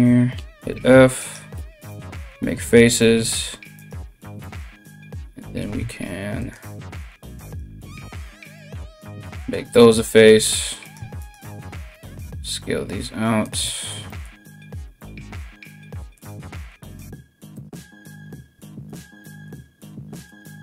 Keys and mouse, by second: 0.8 right click, 0.9-3.3 middle drag, 1.1 f, 1.5 f, 3.3 right click, 3.5-20.6 middle drag, 5.1 ctrl+r, 7.0 right click, 7.6 f, 7.8 f, 10.4 right click, 10.8 right click, 11.5 alt+s, 16.3 g, 18.1 1, 18.5 right click, 19.2 g.